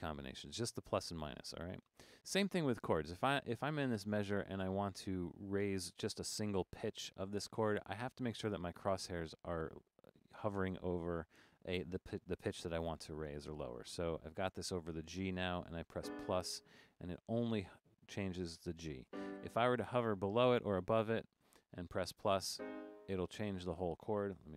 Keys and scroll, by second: 1.8 Down, 4.3 Up, 6.6 Up, 6.7 Up, 7.2 Down, 7.4 Down, 7.6 Up, 8.0 Up, 8.5 Up, 8.9 Up, 14.5 Down, 14.8 Up, 19.1 -, 19.6 Down, 19.8 Down, 20.0 Down, 24.4 0.